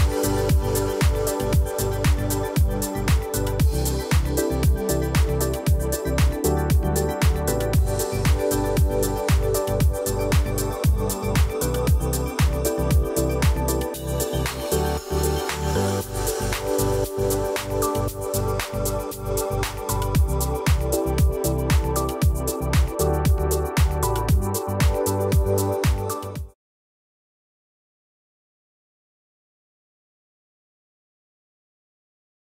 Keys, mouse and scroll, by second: 0.5-3.2 alt+shift+drag, 14.3-15.0 alt+scroll up 2, 15.0-15.6 alt+scroll up 1, 15.6 alt+scroll down 1, 16.1-16.6 alt+scroll up 1, 16.6-17.3 alt+scroll down 1, 17.3 alt+scroll up 1, 17.7 click, 18.6 alt+scroll up 1, 19.2 alt+scroll down 1, 19.4-19.8 alt+scroll up 1, 20.5 F7, 21.0-21.6 scroll up 1, 21.6-22.1 alt+scroll down 1, 22.1-22.5 alt+scroll up 1, 22.5-22.8 alt+scroll down 1, 22.8-23.2 alt+scroll up 1, 24.2 click, 24.6-25.3 typing, 26.3-27.1 typing, 28.2-29.0 typing, 28.5 click.